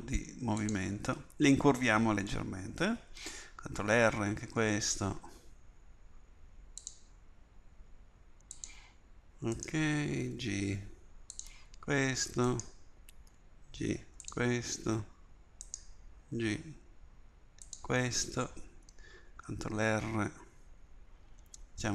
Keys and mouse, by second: 3.9 ctrl+r, 9.6-11.4 drag, 10.3 g, 12.5-14.4 drag, 13.3 g, 15.7-17.7 drag, 16.4 g, 19.3 ctrl+r.